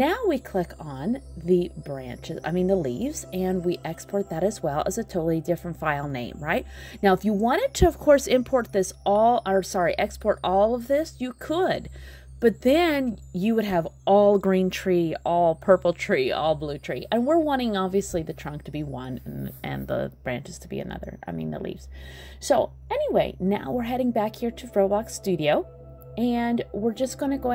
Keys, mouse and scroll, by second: 3.4 click, 8.1 click.